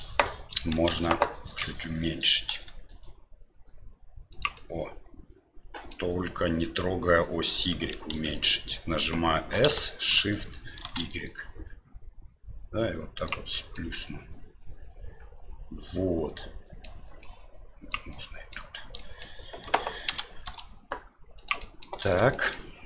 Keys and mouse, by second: 0.9 alt+a, 1.2 click, 2.5 s, 4.6-6.0 middle drag, 8.1 ctrl+z, 9.6 s, 13.8-16.9 middle drag, 17.3 click, 18.1 middle click, 19.0 middle click, 20.1 s, 21.7 middle click, 22.0 Tab, 22.3 middle drag.